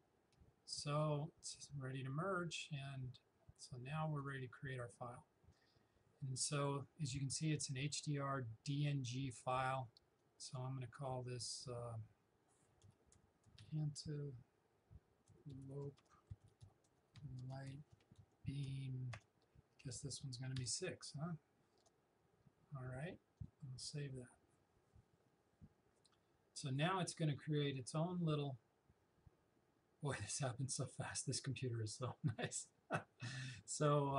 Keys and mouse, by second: 4.2 click, 10.2-12.9 drag, 12.9 shift+a, 13.2 n, 15.3-17.9 typing, 19.1 space, 20.6 6, 21.8 space, 23.4 click.